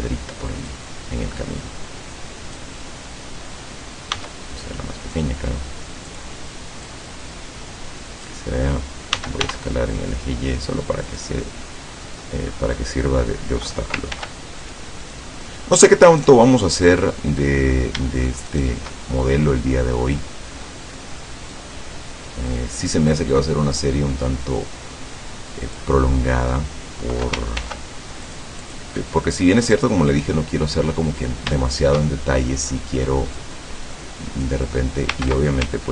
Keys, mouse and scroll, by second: 0.7-2.8 drag, 4.2 s, 6.1 click, 6.9-8.5 drag, 9.2 s, 9.5 y, 11.1 click, 11.7 middle click, 12.4 scroll up 2, 12.7 middle click, 14.2 ctrl+r, 14.7 ctrl+click, 15.1 ctrl+click, 16.2 right click, 16.5 middle click, 16.7 scroll up 2, 17.4-17.8 scroll up 2, 18.5 shift+right click, 19.0 shift+middle click, 20.0 scroll down 2, 20.2 middle click, 21.6-26.0 drag, 27.6 ctrl+r, 28.3 click, 28.7 click, 29.7-31.1 right drag, 29.9-31.1 drag, 31.6 shift+click, 32.5 middle click, 33.4-34.6 drag, 34.6 middle click.